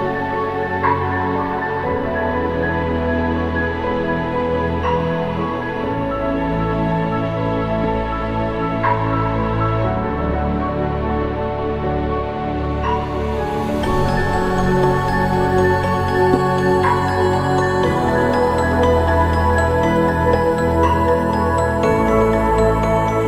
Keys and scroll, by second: 2.1 ctrl+-, 7.9 ctrl+=, 8.0 ctrl+=, 8.5 ctrl+-, 8.6 ctrl+-, 12.8 ctrl+=, 13.4 ctrl+alt+=, 15.2 ctrl+-, 15.4 ctrl+=.